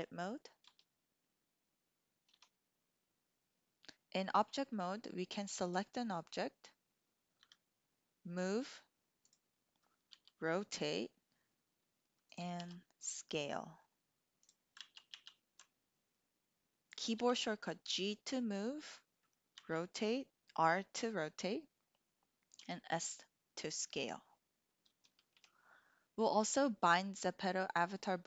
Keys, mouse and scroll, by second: 0.7 Tab, 2.3 Tab, 5.6 click, 7.4 g, 9.2 click, 10.1 r, 12.6 s, 14.5 drag, 14.8 ctrl+z, 15.2 ctrl+z, 17.2 g, 19.6 r, 22.5 s, 25.3 Escape.